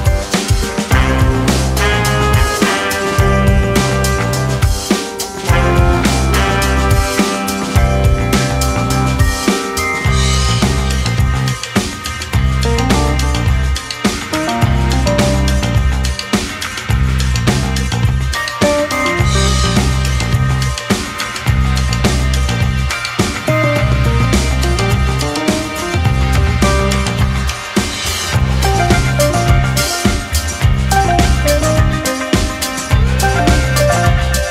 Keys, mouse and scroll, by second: 0.0-1.0 shift+middle drag, 1.0 shift+z, 1.3 Tab, 1.6 scroll down 1, 1.8-3.4 middle drag, 4.6-6.1 scroll down 1, 7.1 KP_3, 8.7 KP_1, 9.0 Tab, 9.3 scroll up 2, 9.6-11.0 middle drag, 11.0 ctrl+r, 12.1-13.2 scroll up 1, 13.2 click, 13.7 2, 13.8 shift+click, 14.7 ctrl+b, 16.1 click, 16.7 3, 16.9 click, 17.2 click, 17.6 shift+click, 18.0 KP_1, 18.9 e, 20.0-20.7 scroll down 2, 20.7 g, 23.3 shift+z, 23.5-24.0 scroll up 1, 24.0 shift+middle click, 24.4-25.3 scroll up 1, 25.3 click, 26.5 1, 26.6-28.0 drag, 28.0 g, 29.6 ctrl+z, 29.9 scroll up 2, 30.1 click, 30.9-31.9 scroll down 1, 31.9 ctrl+r, 34.4 click.